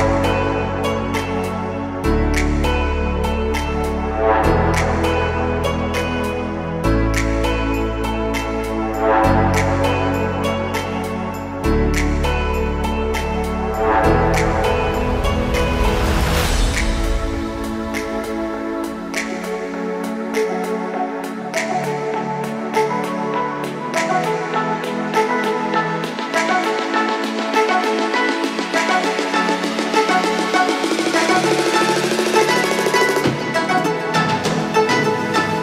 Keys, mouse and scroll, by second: 1.1-2.0 scroll down 1, 2.0-3.2 scroll down 1, 3.2 click, 4.1 s, 7.8 click, 8.7-9.2 scroll down 1, 9.2 click, 9.6-10.6 scroll down 2, 10.6 Tab, 12.5 click, 15.5 typing, 17.8-22.1 drag, 20.5 g, 22.9 click, 24.3-25.9 right drag, 29.0 click, 30.2 click, 30.4-34.8 drag, 32.8 b, 35.5 click.